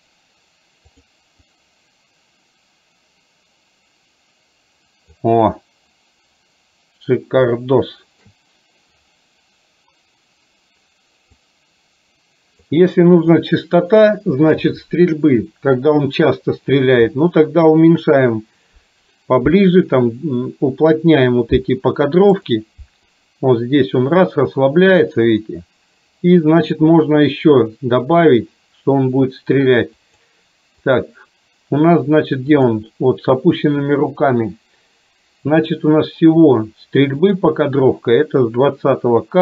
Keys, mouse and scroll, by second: 1.1 click, 1.6-5.2 drag, 7.7-8.3 shift+middle drag, 11.6-12.8 drag, 22.6 click, 23.2-26.8 drag, 30.2 click, 31.1 click, 32.7 click, 37.3 click.